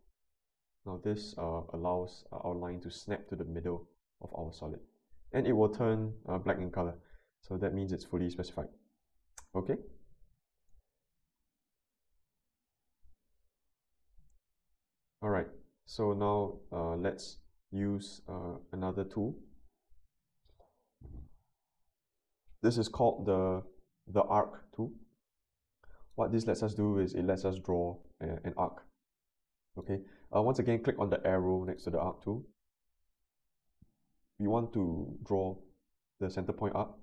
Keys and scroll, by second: 14.3 n.